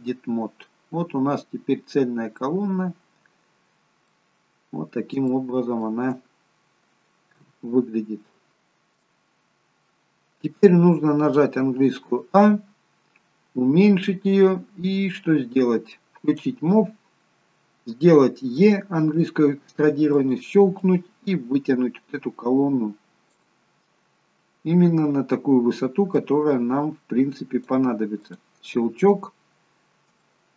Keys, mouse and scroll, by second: 0.4-1.5 scroll up 6, 1.5-2.5 scroll up 10, 2.5 scroll up 4, 2.8-4.1 scroll down 2, 4.1 middle click, 4.1-5.2 scroll down 6, 5.4 shift+middle click, 6.5-7.1 scroll down 2, 7.1 scroll down 2, 7.4 KP_1, 8.5 shift+middle click, 8.5-9.1 scroll up 8, 9.3-10.0 scroll up 1, 11.8 a, 12.7-13.7 scroll down 3, 13.7-14.9 scroll down 3, 14.9-15.3 scroll down 1, 16.4 click, 19.6 e, 21.0 click, 24.2-24.8 scroll down 1, 26.3 click, 26.3-27.7 scroll down 5, 28.4 click, 28.9-30.2 scroll up 2, 30.2 scroll up 4, 30.3 shift+middle click.